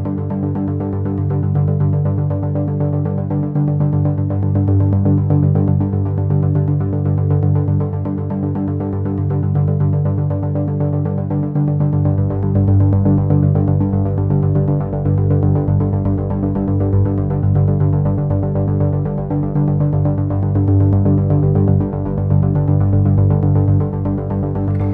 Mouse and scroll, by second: 0.9 click, 1.8 middle click, 4.6 middle click, 5.2 middle click, 7.5 middle click, 7.9 middle click, 8.5-9.6 scroll up 3, 9.9 scroll up 1, 11.2 click, 12.2-12.8 scroll down 4, 13.0-13.3 scroll down 2, 13.9-14.2 scroll down 2, 14.5-14.8 scroll down 2, 16.0-16.6 scroll up 2, 17.0 scroll up 1, 17.7 scroll up 1, 18.3-19.0 scroll down 2.